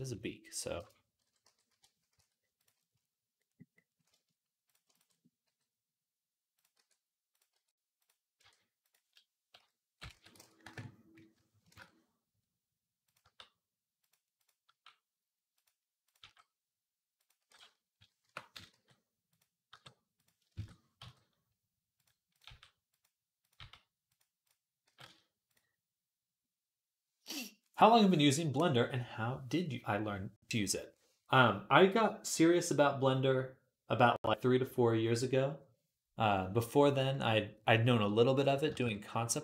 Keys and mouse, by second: 1.2 ., 2.0 s, 5.3 g, 6.6 e, 7.4 r, 8.2 e, 9.4 ., 9.9 s, 11.5 shift+Tab, 13.1 g, 14.2 click, 14.3-15.3 middle drag, 14.5 g, 16.0 g, 17.8 ., 18.5 g, 19.5 g, 20.4 shift+Tab, 20.8 g, 22.3 g, 23.4 g, 24.7 g, 38.4-39.4 shift+middle drag, 38.6 shift+Tab.